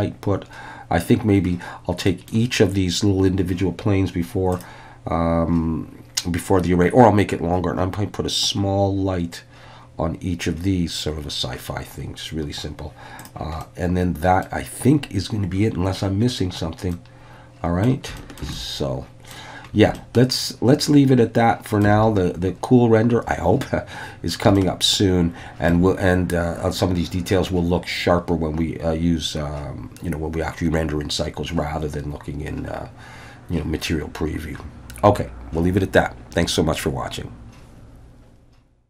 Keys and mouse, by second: 2.1 middle drag, 4.5 click, 13.2 click, 13.6-14.5 middle drag, 16.9-17.9 middle drag, 18.2 shift+middle click, 18.5 middle click, 20.0-21.9 shift+middle drag, 24.6-25.8 shift+middle drag.